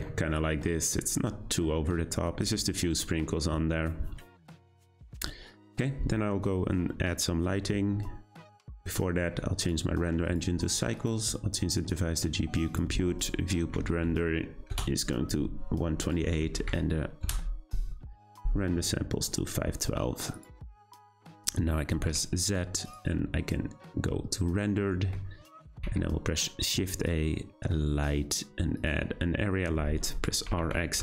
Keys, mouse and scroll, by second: 4.9-5.4 scroll down 1, 5.4-7.3 scroll up 1, 8.6 click, 9.5-15.7 drag, 16.0-19.0 drag, 20.3 click, 22.0 z, 25.8 shift+a, 29.4 scroll down 1, 30.3 r.